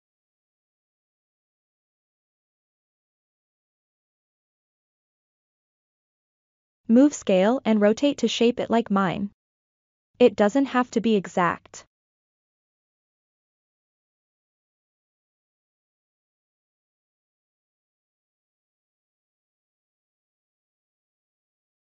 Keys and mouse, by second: 1.4 s, 1.9-4.1 drag, 4.5 click, 4.9 g, 5.2-7.2 drag, 7.9 s, 8.4 click, 10.7 click, 11.3 click, 11.8 g, 12.1-13.4 drag, 14.7-15.7 drag, 18.2 g, 18.7 click, 20.3 click, 21.3 s, 21.5 click.